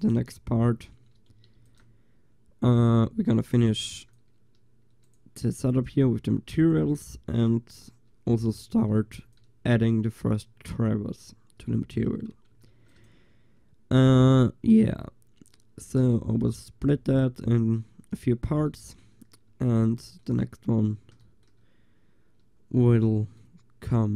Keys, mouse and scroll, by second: 1.6 ctrl+s, 3.8 ctrl+s, 5.1-5.7 drag, 5.9 g, 9.0 ctrl+s, 12.7 ctrl+s.